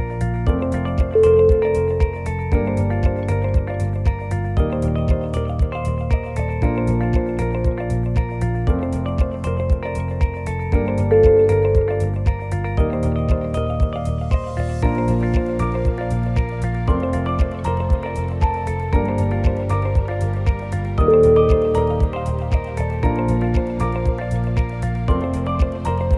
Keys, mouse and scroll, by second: 0.8 click, 1.1 click, 1.6 o, 1.8 g, 4.2 o, 4.9 alt+click, 5.3 g, 7.0 click, 7.5 g, 8.3 g, 9.3 click, 9.3 shift+z, 9.6 g, 22.1 click, 22.1 g.